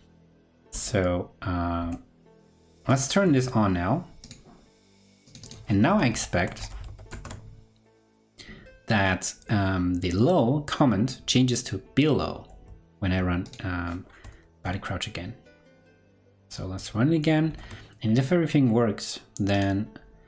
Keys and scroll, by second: 1.7 ctrl+super+Left, 6.8 super+s, 7.1 super+Tab, 14.4 super+r, 17.9 ctrl+Left.